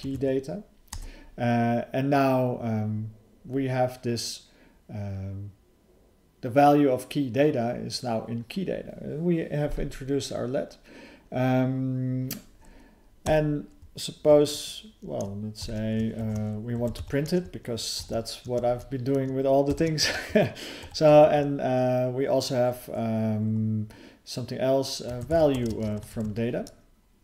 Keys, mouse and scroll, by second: 0.9 Return, 6.6 typing, 16.2 (, 18.0 ctrl+), 20.8 (.